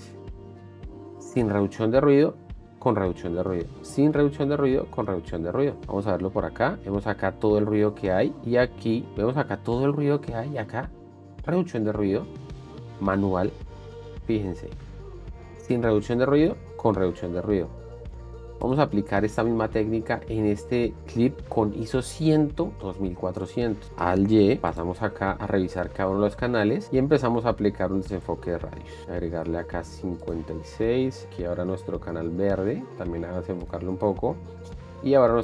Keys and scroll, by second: 2.8 shift+d, 5.7 shift+d, 8.8 shift+d, 11.1 shift+d, 13.6 shift+d, 16.8 shift+d.